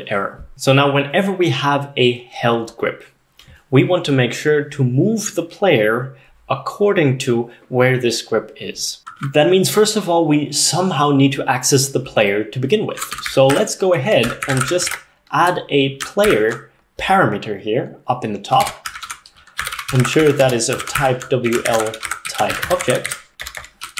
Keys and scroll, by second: 12.8-16.9 typing, 18.8-23.8 typing.